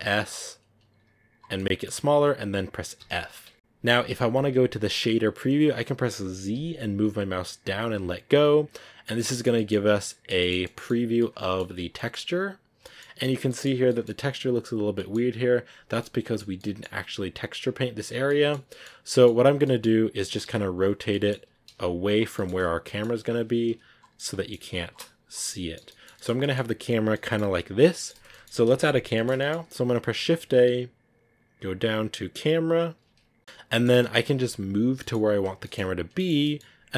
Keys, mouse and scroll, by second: 0.9 g, 1.4-7.9 middle drag, 7.9 z, 8.7 scroll down 3, 8.9-10.5 middle drag, 10.5-10.9 scroll up 4, 10.6 middle click, 11.1 middle click, 11.7 scroll down 1, 11.9 middle click, 12.1 scroll up 3, 12.3 scroll down 2, 12.8-16.7 shift+middle drag, 16.7 scroll up 2, 17.9 scroll down 3, 18.2 middle click, 18.8 scroll down 2, 18.9 middle click, 19.5-20.9 scroll up 2, 19.6 middle click, 20.9 scroll down 1, 21.0 middle click, 21.5 r, 22.4 scroll down 2, 22.7 g, 23.2 r, 24.0 middle click, 24.5 g, 25.3-34.7 middle drag, 34.7 scroll down 1, 34.9 middle click, 35.8 scroll up 1, 36.6-36.9 middle drag.